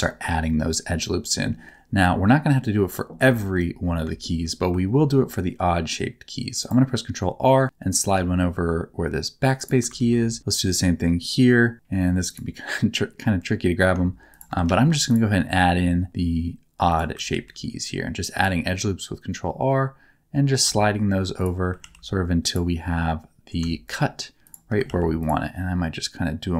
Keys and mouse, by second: 0.1 shift+middle click, 3.4 shift+middle click, 4.2 shift+middle click, 4.9 ctrl+r, 9.6 shift+click, 9.9 ctrl+r, 14.3 shift+click, 14.6 ctrl+r, 16.9 click, 21.4 shift+click, 21.8 ctrl+r, 24.4 click.